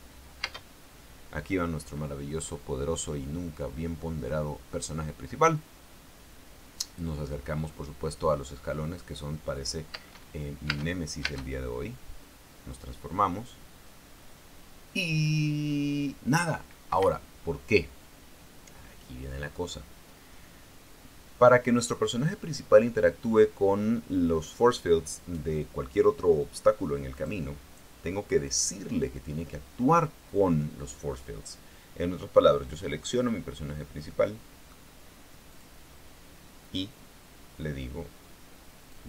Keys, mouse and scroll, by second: 1.1 space, 10.7 space, 11.4 space, 17.6 Escape, 27.9 right click, 34.8 middle click, 36.2 click.